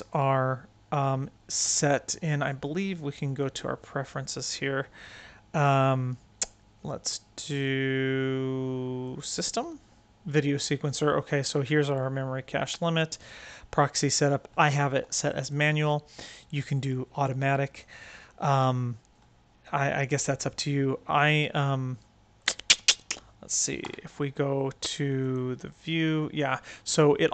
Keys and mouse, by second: 2.2-3.4 drag, 23.8 n.